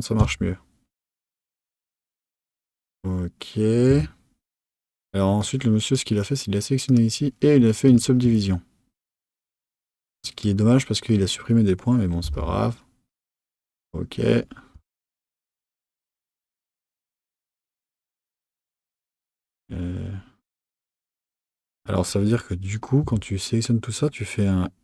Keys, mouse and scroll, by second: 3.9 Tab, 5.4 click, 6.9-10.2 right drag, 10.2 click, 12.2 g, 13.7 click, 14.7 g, 23.0 a.